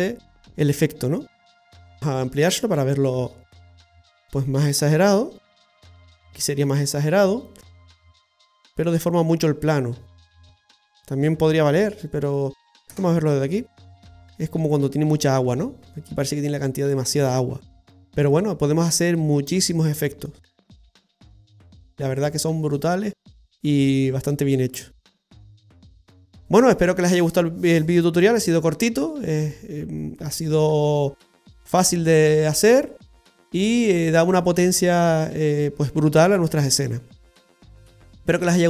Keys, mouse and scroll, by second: 0.2-0.9 scroll up 2, 1.4 scroll down 1, 2.5 click, 9.1 click, 13.1 KP_0, 14.4-15.0 scroll up 2.